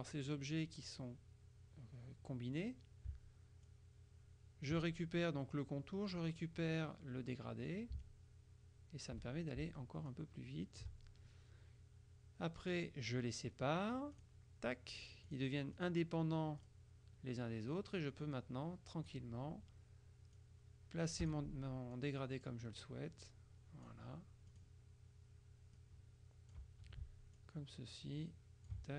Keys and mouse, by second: 3.8-5.3 shift+drag, 8.1-9.7 shift+drag, 10.2-11.4 drag, 12.7 click, 14.2 click, 15.4 click, 16.7 click, 18.3 click, 20.4 click, 21.3 Escape, 22.0 click, 23.3-24.4 drag, 24.6 click, 25.8 click, 27.4-28.9 ctrl+shift+drag.